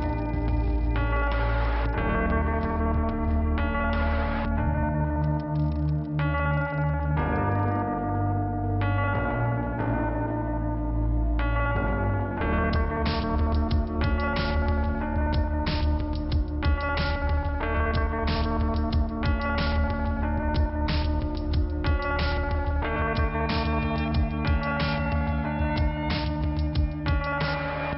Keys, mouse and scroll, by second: 0.4 click, 0.6 double click, 2.4 click, 3.9 click, 4.9 click, 9.3 click, 12.0 click, 12.2 click, 14.1 click, 15.1 click, 17.0-17.5 scroll up 1, 18.5 click, 19.3 click, 20.2 click, 21.0 scroll down 1, 25.1 click.